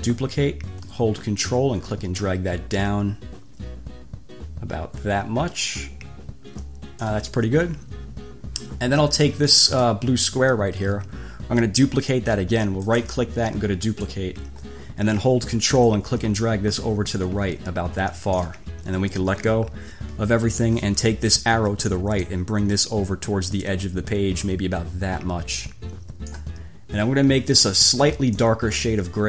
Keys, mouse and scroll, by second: 0.0 click, 1.6-7.4 ctrl+drag, 9.8 click, 13.0 click, 14.1 click, 16.1-18.8 ctrl+drag, 22.4-26.7 drag, 28.6-29.2 drag.